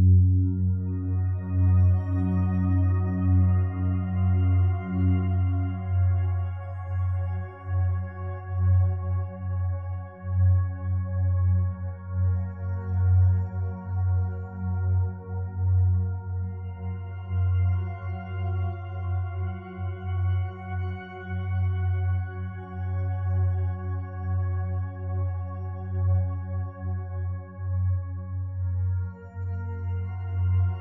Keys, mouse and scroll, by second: 17.2 5, 17.4 Return, 28.7 ctrl+7.